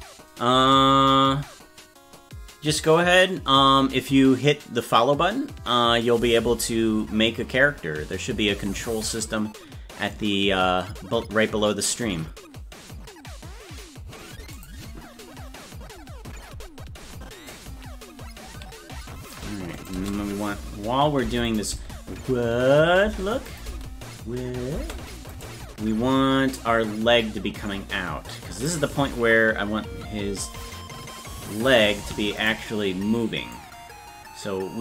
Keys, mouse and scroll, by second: 19.8 click, 19.9 space, 21.5 click, 21.5 space, 21.7 space, 23.5 click, 23.5 space, 25.4-26.6 right drag, 25.4 space, 26.6-28.7 drag, 33.5-34.8 drag.